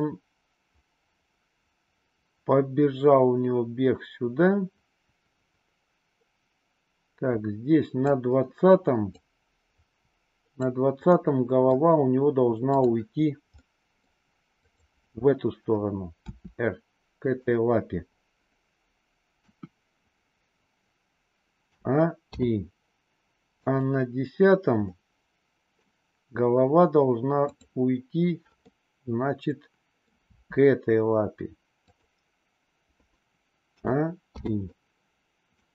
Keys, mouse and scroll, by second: 0.0-8.0 drag, 9.0-10.6 drag, 11.0-11.8 middle drag, 12.8 click, 13.8 middle click, 14.5-15.3 drag, 16.3 r, 19.3 KP_1, 21.6 a, 22.3 i, 23.7 click, 24.7-25.9 middle drag, 27.5-28.0 drag, 28.6-30.1 middle drag, 30.2 r, 33.6 a, 34.4 i, 34.8-35.6 middle drag.